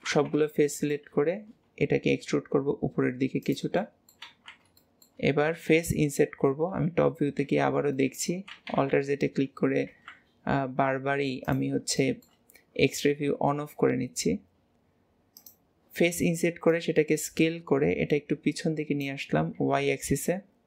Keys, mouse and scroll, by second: 0.7 middle click, 3.9 middle click, 4.4 alt+z, 4.8-6.7 shift+middle drag, 6.7 KP_7, 8.0 shift+middle click, 8.5 alt+z, 12.0 shift+middle click, 12.5 scroll up 1, 13.4 s, 16.7 click.